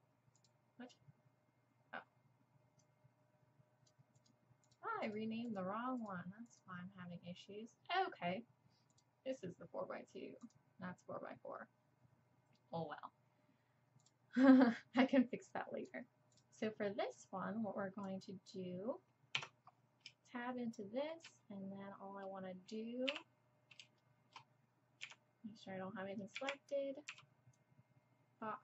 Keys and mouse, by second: 0.4-4.2 drag, 4.2-4.7 middle drag, 4.7-15.5 drag, 15.5-16.4 middle drag, 18.8 click, 19.4 Tab, 19.8 middle click, 20.6 click, 21.6 click, 22.9-26.4 drag, 23.1 KP_7, 25.0 a, 26.4 z, 27.1 b.